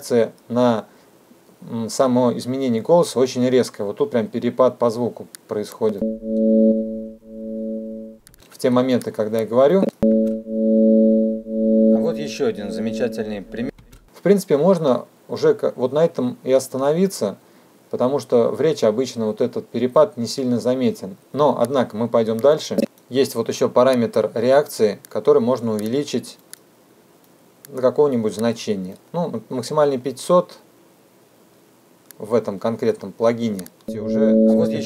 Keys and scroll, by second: 5.8 space, 33.7 space.